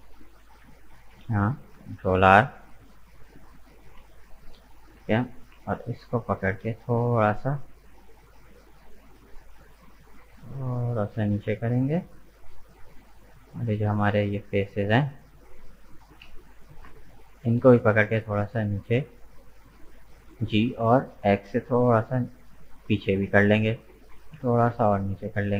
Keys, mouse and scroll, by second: 1.0 ctrl+r, 3.6 alt+shift+right click, 4.0-6.6 middle drag, 6.6 g, 11.8-13.1 middle drag, 13.1 click, 13.9 right click, 14.4 shift+right click, 14.8 shift+right click, 15.3 shift+right click, 16.2 KP_1, 17.7 g, 20.3 g, 24.1 g.